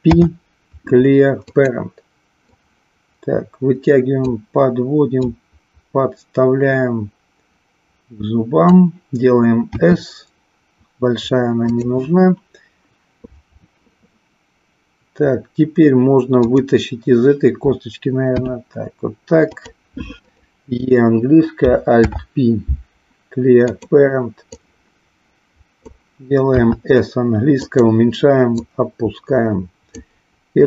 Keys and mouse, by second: 0.1 alt+p, 2.5-4.4 drag, 5.2-8.6 drag, 9.8 s, 18.4 e, 19.7 click, 20.3 click, 21.9 alt+p, 24.4-25.9 drag, 26.4 s, 27.6 click, 28.7-30.0 drag.